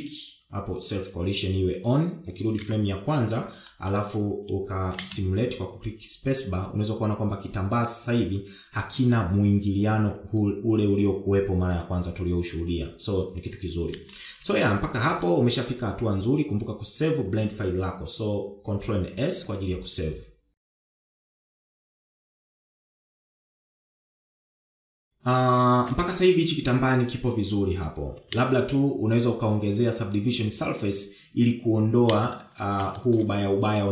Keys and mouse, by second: 0.4 click, 3.3 shift+Left, 4.3 middle drag, 5.7 space, 14.6 space, 14.9 KP_1, 16.0 shift+middle drag, 19.9 ctrl+s, 26.7 shift+Left, 29.1 space, 32.9 space, 33.7 shift+middle drag.